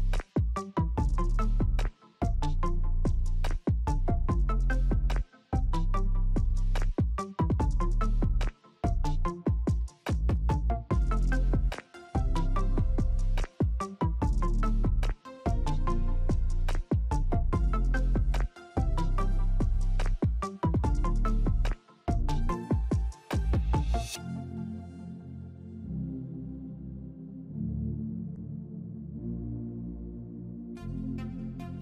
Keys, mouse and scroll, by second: 11.3 alt+click.